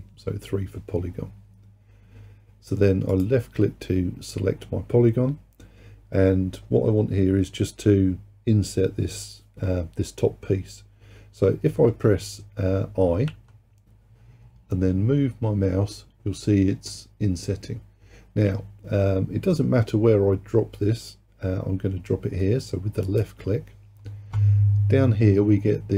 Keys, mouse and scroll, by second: 3.2 click, 13.3 i.